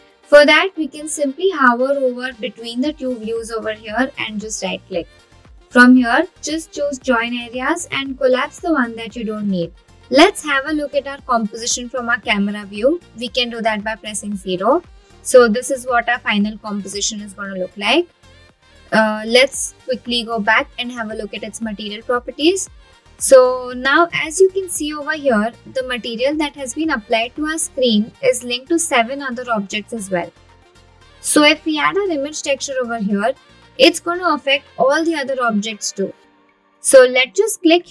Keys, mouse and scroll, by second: 5.0 right click, 5.4-8.7 drag, 9.9 scroll down 2, 11.8 KP_0.